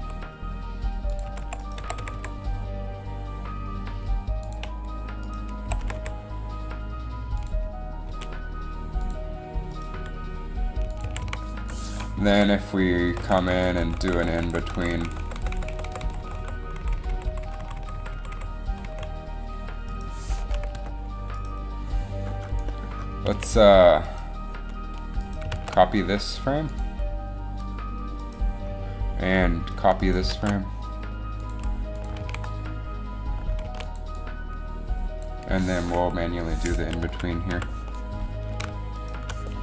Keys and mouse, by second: 0.2 r, 1.4 r, 2.0 r, 2.6 r, 5.4 right click, 5.8 r, 8.2 g, 10.0 g, 11.2 a, 11.4 a, 11.7 i, 12.5 Down, 13.2-16.4 Right, 16.6 Right, 16.9-17.8 Left, 17.9 Left, 18.1 Left, 18.3 Left, 18.5 Left, 19.0 Left, 20.9 g, 23.5 a, 25.7 shift+d, 30.5 shift+d, 32.3 alt+a, 34.0 alt+a, 36.1 KP_3, 37.1 z, 37.6 z, 38.1 KP_3, 38.1 z.